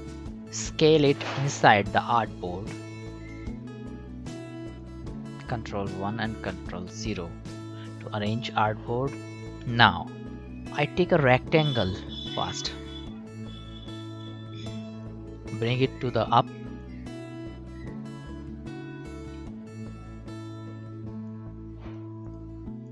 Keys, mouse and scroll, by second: 0.8 alt+scroll down 1, 2.3 shift+click, 5.9 ctrl+1, 6.5 ctrl+0, 7.8-9.2 drag, 12.4 Right, 12.9-15.3 drag, 15.7 ctrl+shift+], 16.8-19.7 drag, 19.7-20.0 alt+scroll down 1, 21.3 click.